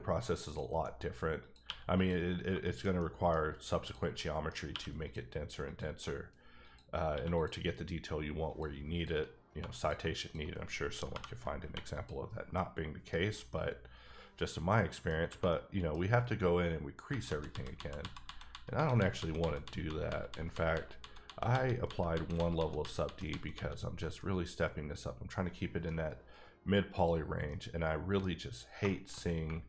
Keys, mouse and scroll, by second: 0.4 click, 1.6 q, 1.9 click, 2.3 scroll down 3, 2.6 shift+middle click, 2.9 scroll up 1, 3.0 middle click, 3.8 click, 4.1 middle click, 4.7 q, 5.0 click, 5.6 click, 6.0 shift+click, 6.6 shift+click, 7.1 q, 7.3 click, 8.5 click, 8.7 shift+click, 9.3 click, 9.5 1, 9.8 click, 9.9 shift+click, 10.4 shift+click, 11.1-11.6 typing, 11.9 click, 12.5 middle click, 13.5 middle click, 15.1 scroll down 3, 15.5 middle click, 16.0-17.1 scroll up 2, 17.2 ctrl+z, 17.5 ctrl+z, 18.0 ctrl+z, 18.2 ctrl+z, 18.7 ctrl+z, 18.9 ctrl+z, 19.4 ctrl+z, 19.6 ctrl+z, 19.8 ctrl+z, 20.3 ctrl+z, 20.5 ctrl+z, 21.0 ctrl+z, 21.2 ctrl+z, 21.8 ctrl+z, 22.1 ctrl+z, 22.3 ctrl+z, 23.0 ctrl+z, 23.3 ctrl+z, 23.6 ctrl+z, 24.1-26.9 middle drag, 26.9 click, 27.5 middle click, 28.2 scroll up 2, 28.8 shift+middle click.